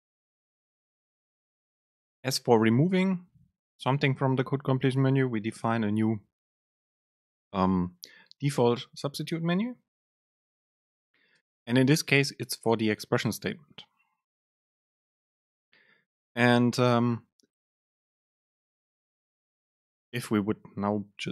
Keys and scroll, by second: 11.5 super+space.